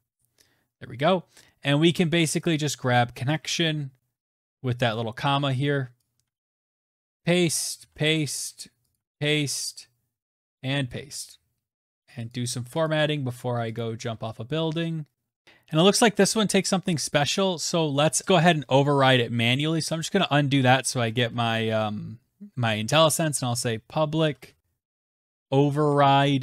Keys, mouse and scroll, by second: 3.0 click, 3.2 ctrl+c, 5.8 click, 6.1 ctrl+c, 6.7 click, 6.9 ctrl+v, 7.5 click, 7.6 ctrl+v, 7.8-8.7 scroll down 2, 8.7 click, 8.7-10.3 scroll, 8.8 ctrl+v, 10.3 click, 10.4 ctrl+v, 11.7 click, 12.1 click, 12.7 click, 13.6 click, 13.9-14.9 scroll, 15.4 Tab, 15.4 click, 16.6 click, 16.8 click, 17.8 click, 18.2 click, 18.7 BackSpace, 19.3 click, 19.7 click, 20.7 Return, 20.9 Return, 22.9-26.4 typing, 23.9 Tab.